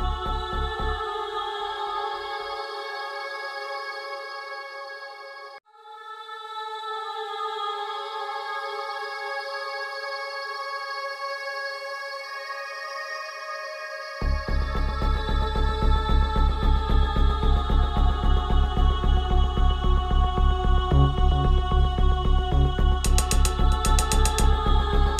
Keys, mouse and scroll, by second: 1.6 click, 6.2 click, 9.3-15.8 drag, 17.4 click, 20.6 click, 21.1 ctrl+t, 22.8-25.1 alt+drag.